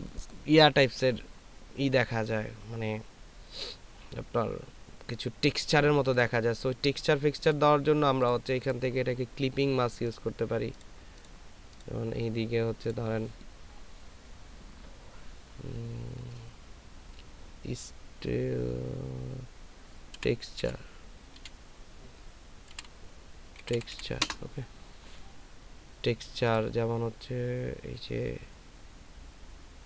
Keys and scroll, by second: 20.6 e, 21.4 x, 22.7 t, 23.6 u, 23.7 r, 23.9 e, 24.2 Return.